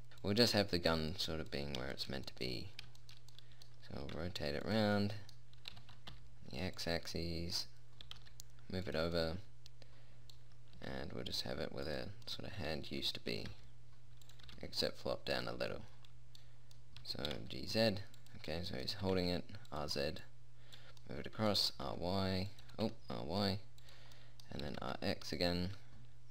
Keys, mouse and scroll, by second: 0.1 middle click, 0.7-1.9 drag, 4.5 r, 6.1 r, 8.5 g, 11.2 r, 12.7-13.7 middle drag, 13.7 r, 14.9 g, 17.7 g, 19.5 r, 22.1 r, 23.1 r, 25.1 r.